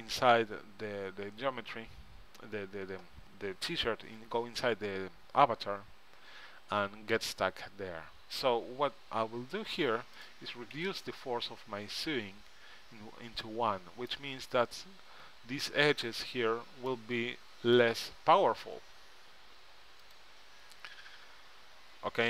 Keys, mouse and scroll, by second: 8.3-10.4 middle drag, 10.4-12.1 drag, 13.6-15.3 middle drag, 17.1-20.2 middle drag, 20.2-22.1 drag.